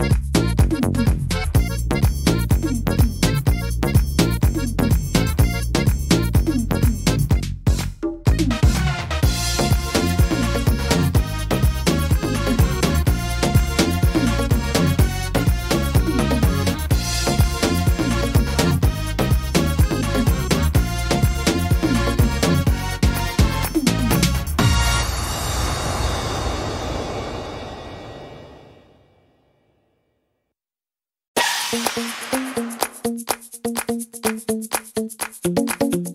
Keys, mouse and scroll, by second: 1.7 click, 4.0 middle click, 6.8 click, 8.8 click, 19.7 click, 22.3 c, 30.8 middle click, 32.0 middle click, 33.1 middle click, 35.3 click, 35.7 click.